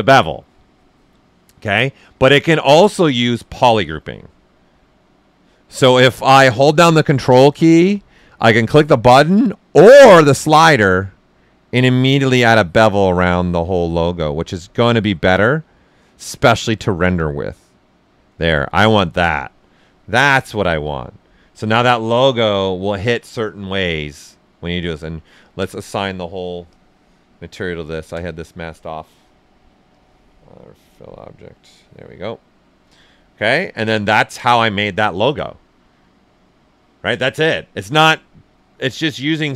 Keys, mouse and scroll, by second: 3.7-10.3 ctrl+right drag, 10.3-20.1 ctrl+drag, 17.5 typing, 20.1-25.4 ctrl+right drag, 25.4 alt+click, 26.7 click, 29.9 click, 32.4 right click, 33.6 typing, 37.7 ,.